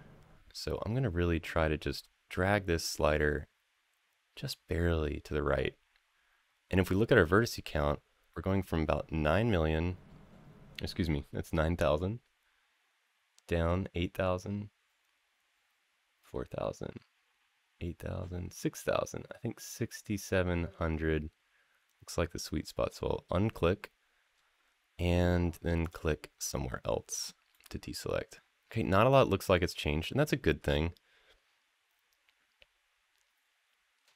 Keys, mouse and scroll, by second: 25.6 click, 27.3-34.1 middle drag.